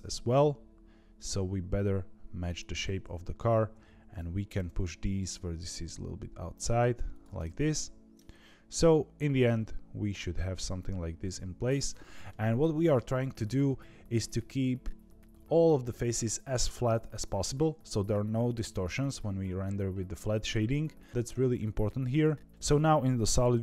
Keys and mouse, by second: 3.4 click, 4.5 g, 7.3 middle click, 8.3 z, 9.4-12.2 middle drag, 13.3 KP_3, 22.5 z.